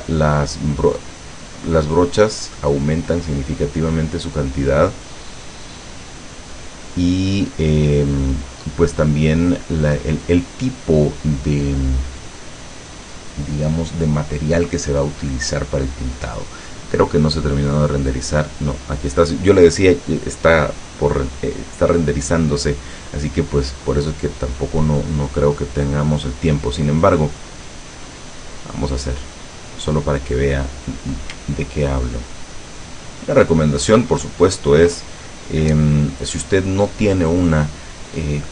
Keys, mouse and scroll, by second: 27.7 click, 28.2 click, 29.5 click, 31.8-32.3 ctrl+scroll up 1, 32.3-33.4 ctrl+scroll down 1, 33.4 ctrl+scroll up 1.